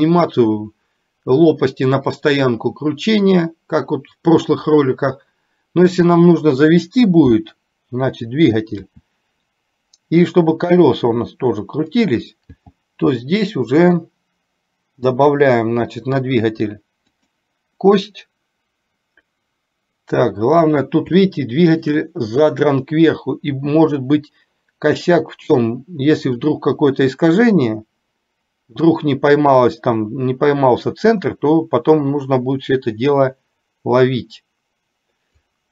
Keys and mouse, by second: 9.0 r, 12.6 g, 21.2 shift+middle click, 23.6 r, 28.1-35.5 drag.